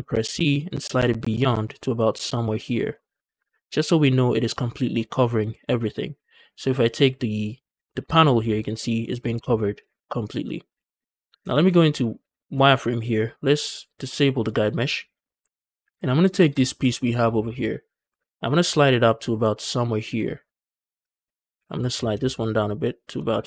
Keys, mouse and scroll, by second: 2.5 shift+click, 3.3 Tab, 3.4-5.1 scroll down 2, 5.1 scroll down 2, 5.4 shift+middle drag, 7.5 click, 7.9 shift+middle drag, 8.2 scroll up 2, 9.0-9.7 scroll down 3, 9.3 shift+middle drag, 9.8-10.3 shift+middle drag, 10.4 scroll up 1, 10.7 shift+middle drag, 10.9-11.4 scroll up 2, 11.3 shift+middle click, 11.3 z, 11.6 shift+middle drag, 11.9 scroll up 2, 12.2 shift+middle click, 14.4 click, 15.3 Tab, 15.8 alt+click, 16.4 alt+click, 16.7 scroll down 2, 16.9 shift+middle click, 17.2-17.6 scroll up 2, 17.4 shift+middle click, 17.9 g, 18.0 g, 20.9 shift+click, 21.2 click, 21.4 g, 21.6 g, 21.8 c, 22.7 shift+click, 23.3 z.